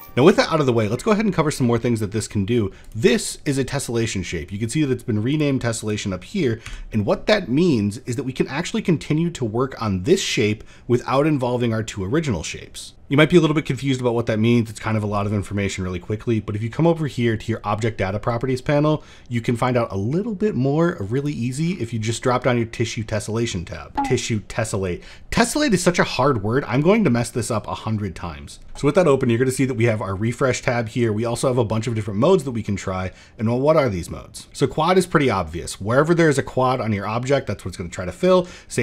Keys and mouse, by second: 0.0 ctrl+z, 1.6 middle click, 2.6 click, 5.0 click, 5.5 click, 6.4 n, 20.9 click.